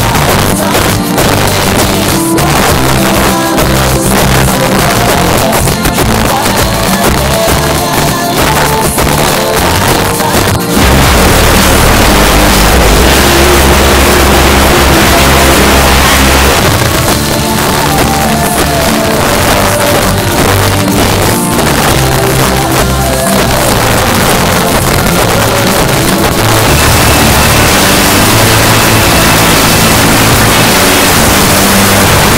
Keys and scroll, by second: 0.0-0.2 typing, 0.5-2.4 Down, 2.6 Down, 2.7 Down, 2.9 Down, 3.0 Down, 3.1 Down, 3.3 Down, 3.4 Down, 3.6 Down, 3.9 Down, 4.1 Down, 4.5 Down, 4.8 e, 16.5 Page_Down.